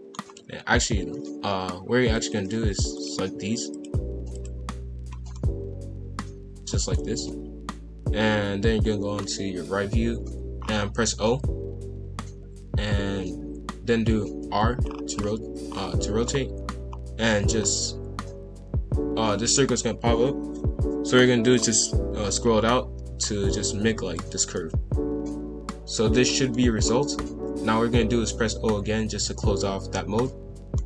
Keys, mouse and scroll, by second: 0.7-2.1 scroll up 1, 2.1-3.0 drag, 3.7 ctrl+click, 4.3 ctrl+click, 5.3-7.0 middle drag, 7.0 KP_5, 7.1 KP_1, 8.3 KP_3, 9.2-10.6 scroll up 1, 10.6-11.2 scroll down 3, 11.2 o, 14.4 r, 24.5-26.8 middle drag, 26.8-28.5 scroll up 2, 28.5 o, 30.1 a, 30.7-30.8 middle drag.